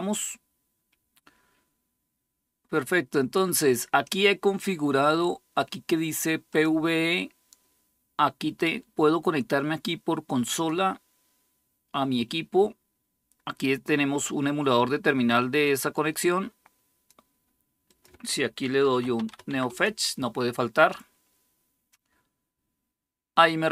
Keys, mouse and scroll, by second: 6.3 click, 10.3 click, 15.4-16.9 drag, 17.5 click, 17.7 click, 18.5 click, 18.6-19.5 typing.